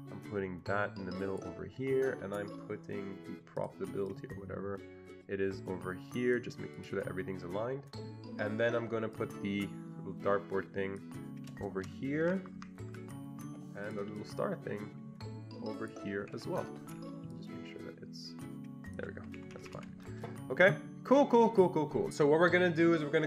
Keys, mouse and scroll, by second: 4.1-9.2 drag, 9.2-12.6 drag, 12.1 Up, 12.4 Up, 12.6 Up, 12.9 Up, 13.9 click, 14.5-16.1 drag, 17.6-19.2 shift+drag, 19.3 Escape, 19.5 Escape, 19.6 Escape, 19.8 Escape, 20.5-20.9 ctrl+scroll down 2, 20.9-21.5 ctrl+scroll up 2.